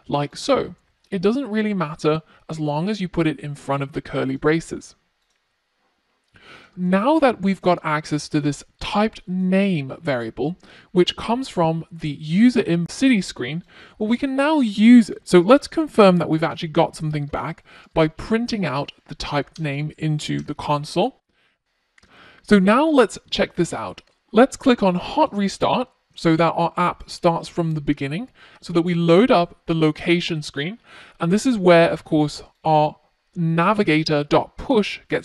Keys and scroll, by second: 19.4 Return, 24.0 ctrl+r.